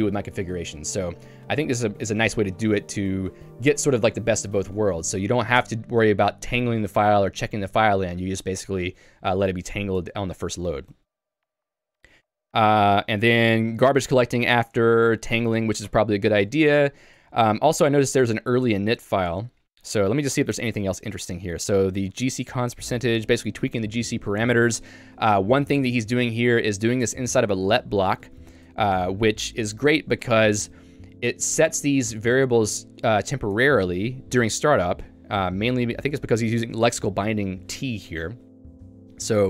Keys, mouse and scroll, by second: 9.4 Escape, 9.9 j, 12.3 j, 12.9 k, 13.9 shift+v, 14.9 Escape, 15.9 ctrl+u, 16.5 ctrl+u, 18.8 j, 22.2 shift+v, 22.5 j, 24.7 Escape, 25.1-27.4 typing, 27.8 ctrl+d, 28.3 ctrl+d, 29.9 ctrl+u, 30.6 k, 32.6 shift+v, 32.9 j, 33.5 Escape, 34.9-36.0 l, 36.2 shift+v, 38.1 Escape, 38.6 j.